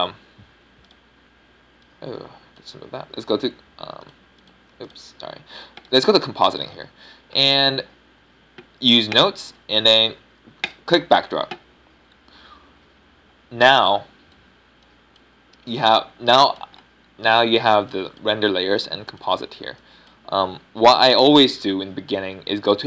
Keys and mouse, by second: 2.8-5.9 drag, 13.7-22.8 middle drag.